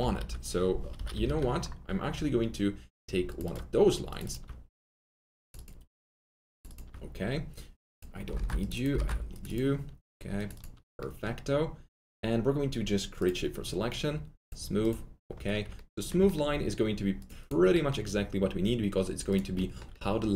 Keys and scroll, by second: 0.1 F4, 0.9 F3, 1.1 F3, 1.2-2.1 typing, 8.3-9.8 typing.